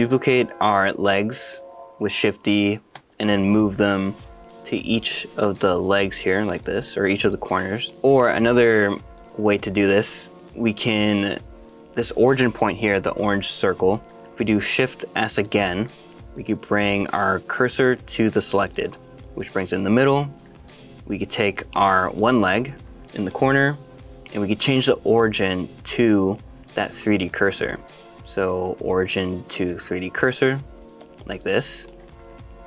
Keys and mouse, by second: 1.1 shift+d, 2.9 x, 4.0 y, 6.5 click, 6.8 middle click, 7.6 middle click, 10.5 x, 10.9 click, 14.1 middle click, 15.4 shift+s, 19.3-20.4 middle drag, 22.1 middle click, 22.8 shift+middle click, 25.2-30.3 drag, 31.0 middle click, 32.1 shift+middle click, 32.3 middle click.